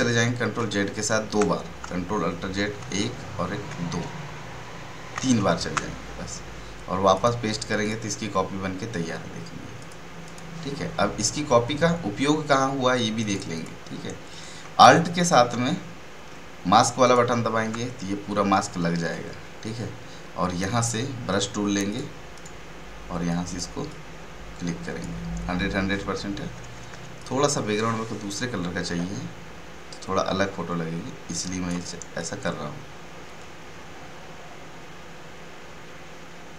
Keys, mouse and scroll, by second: 0.5 ctrl+d, 2.8 ctrl+alt+z, 7.1 click, 13.1 click, 17.0 alt+click, 21.3 right click, 21.8 click, 22.3 right click, 23.2-26.5 drag, 26.5 ], 26.7 ], 26.9 ], 27.1-36.5 drag.